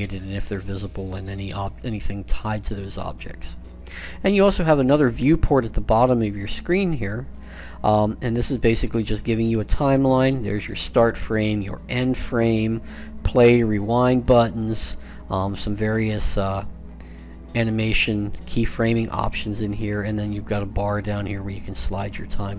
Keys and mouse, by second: 20.8-22.5 drag.